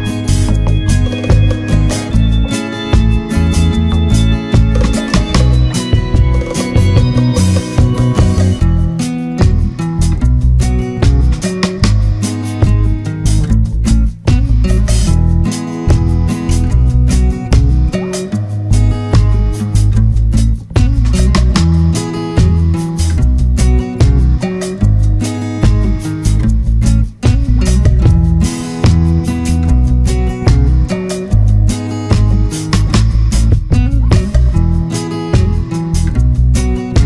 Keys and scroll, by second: 28.9 ctrl+-.